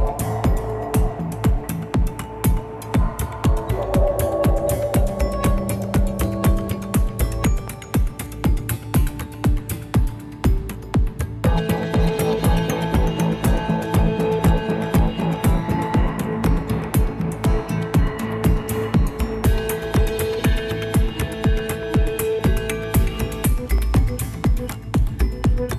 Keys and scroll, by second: 0.3 Return, 0.3 typing, 4.9 ctrl++, 5.1 ctrl++, 7.3 ctrl+-, 7.5 ctrl+-, 7.6 ctrl+-, 7.7 ctrl+-, 7.8 ctrl+-.